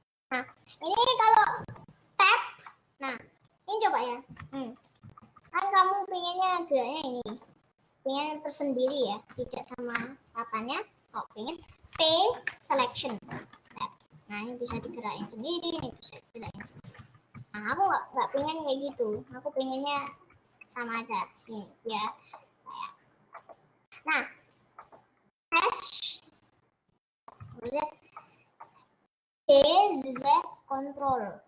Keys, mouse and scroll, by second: 0.0 middle click, 0.5-0.9 scroll up 3, 0.9 middle click, 1.1-1.8 scroll down 1, 1.8 middle click, 2.1 Tab, 2.7 middle click, 3.5 click, 3.7 scroll down 4, 4.4 g, 5.3 ctrl+z, 5.6 scroll up 4, 6.1 click, 7.6-9.5 middle drag, 9.5 Tab, 10.8 middle click, 11.3 scroll down 1, 12.7 p, 13.2 middle click, 13.5 Tab, 14.1-14.7 scroll down 3, 14.7 g, 15.3 click, 15.8 g, 16.8 ctrl+z, 16.9 ctrl+z, 17.3 ctrl+z, 17.7 ctrl+z, 18.5 ctrl+z, 19.3 ctrl+z, 20.0 ctrl+z, 20.3 scroll up 1, 20.9 middle click, 21.7 Tab, 22.1-23.6 middle drag, 23.6-23.9 scroll down 2, 24.3 scroll up 2, 24.8 middle click, 25.4 s, 27.2 middle click, 27.5 ctrl+z, 28.1-28.5 scroll down 2, 28.6 middle click, 29.4 g.